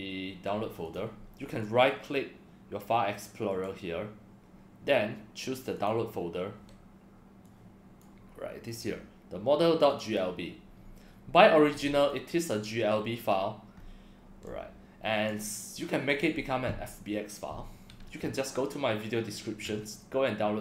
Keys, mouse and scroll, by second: 0.8 click, 5.8 click, 7.5-8.0 drag, 8.7 click, 9.9 click, 10.0 click, 12.1-13.3 drag, 13.9 scroll down 1, 14.2 scroll up 1, 14.4 drag, 16.2 click, 18.3 click, 20.0 scroll down 1.